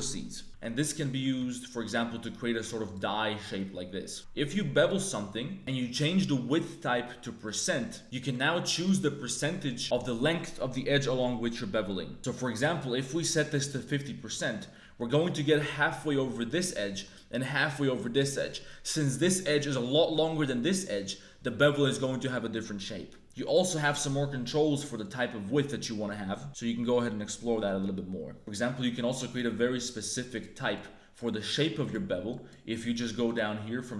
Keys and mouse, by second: 0.4 ctrl+b, 0.4 z, 2.9 click, 3.3 Tab, 3.5 click, 4.1 ctrl+b, 4.1 2, 5.9-7.5 drag, 8.0 ctrl+z, 8.0 ctrl+b, 12.1 click, 13.1-14.3 drag, 14.5 middle click, 15.2 middle click, 16.8 middle click, 18.4 middle click, 20.8-22.2 middle drag, 23.5-25.1 drag, 28.9 click, 29.8 click, 30.7 click, 31.6 click, 32.2 click, 33.2 click.